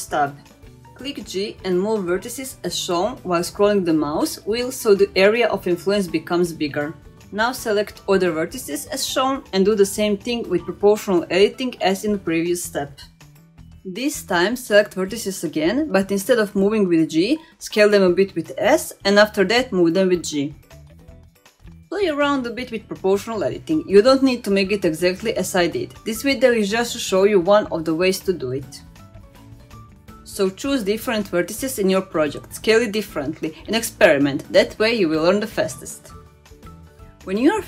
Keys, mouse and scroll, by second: 1.2 g, 6.8 middle click, 7.6 click, 8.0 shift+click, 8.4 shift+click, 9.5 g, 13.2-15.7 middle drag, 15.9-16.3 scroll up 1, 16.7 click, 18.1-19.7 middle drag, 20.5 middle click, 21.7-22.7 middle drag, 23.3 shift+click, 23.7 middle click, 24.6 s, 27.6 g, 35.1-37.6 middle drag.